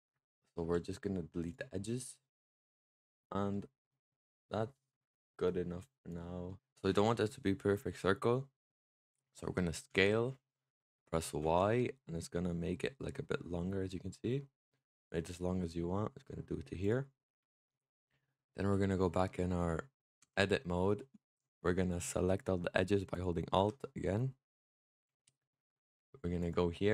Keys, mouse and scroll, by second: 0.4 x, 1.8 middle click, 2.6 Tab, 3.4-4.8 middle drag, 4.8-6.0 scroll up 3, 6.0 click, 6.3 middle drag, 6.8-9.8 middle drag, 9.8 s, 17.0-20.1 middle drag, 20.1 Tab, 21.2-23.0 middle drag, 23.0 alt+click, 23.7-26.3 middle drag, 26.3 click.